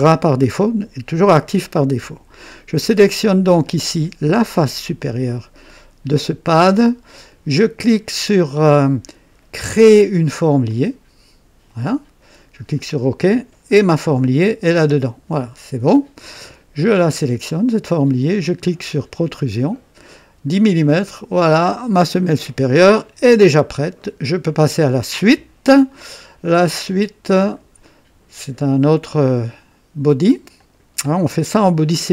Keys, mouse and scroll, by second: 3.6 click, 4.6 click, 10.7 click, 12.8 click, 13.8 scroll down 2, 17.5 click, 19.3 click, 21.3 click, 23.5 scroll down 2, 24.0-24.5 right drag, 27.4 click, 30.6 click.